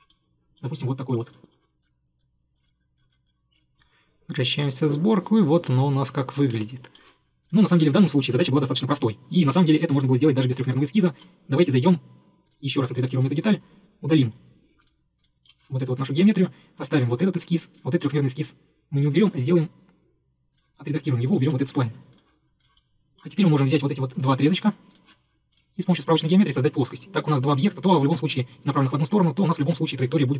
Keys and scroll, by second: 15.5 Delete, 18.1 Delete, 21.5 Delete.